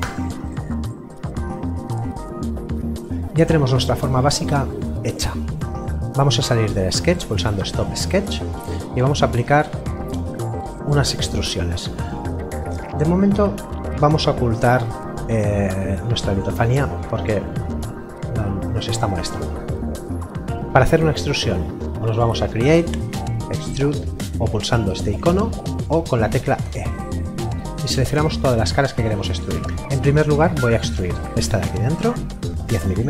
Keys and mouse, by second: 0.0 Return, 7.7 click, 8.6 middle click, 17.2 middle click, 22.0 click, 25.7 click, 26.6 e, 29.3 click, 32.6 KP_1, 32.8 KP_0.